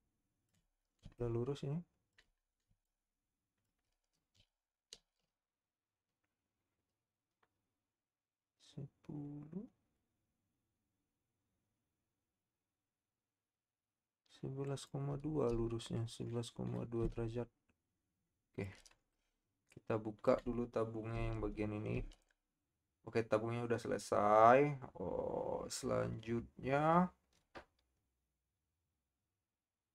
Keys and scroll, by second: 4.3 shift+r, 5.2 shift+z, 21.9 Tab.